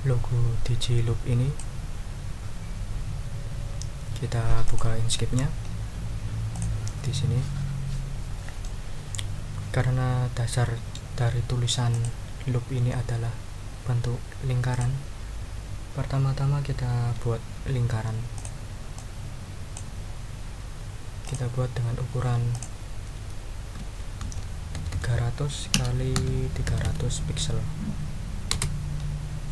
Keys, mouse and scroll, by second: 4.6 click, 6.5 click, 8.6 click, 9.1-9.6 scroll up 2, 9.6-11.1 drag, 11.9 click, 14.7 click, 18.3 click, 18.9-19.9 drag, 21.2 click, 22.5 click, 23.7 ctrl+a, 24.2 ctrl+3, 24.7 ctrl+0, 25.7 Tab, 26.1 3, 26.6 0, 28.5 Return.